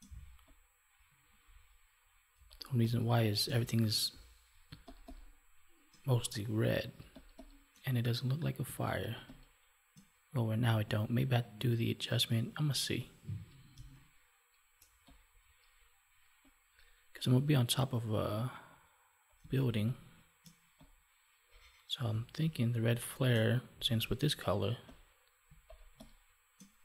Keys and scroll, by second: 2.3 space, 4.6 space, 13.7 space, 19.4 space, 22.0 space, 25.4 space.